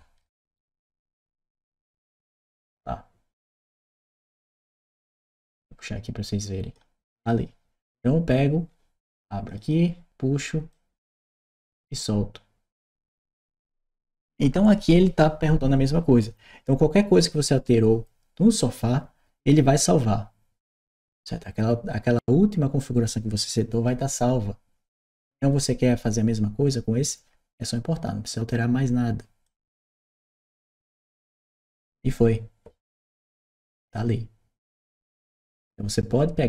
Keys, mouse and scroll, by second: 0.2 shift+p, 2.2 click, 5.2-6.5 drag, 7.0 click, 9.3 click, 10.5-11.8 drag, 29.3 click, 32.9 click.